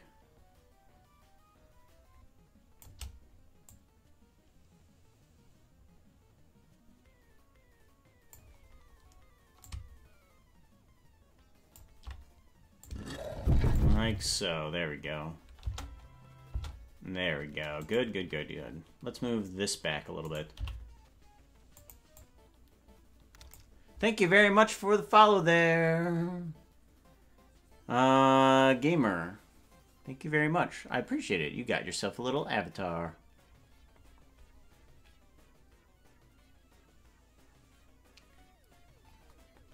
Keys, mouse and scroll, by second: 3.7-8.6 drag, 9.6-13.8 drag, 15.6 space, 16.7 space, 17.8 right click, 20.5 right click, 20.5 g, 22.2-23.6 drag.